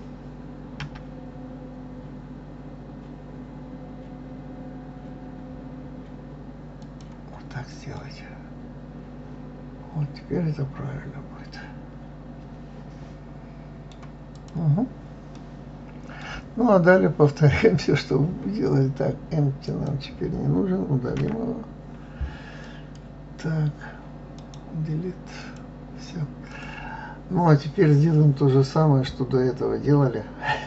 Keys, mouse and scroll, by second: 0.5 s, 7.6-10.6 middle drag, 14.0 click, 15.0-18.0 middle drag, 19.3 click, 20.8 Delete, 22.3 click, 24.0-26.2 right drag, 26.2 click.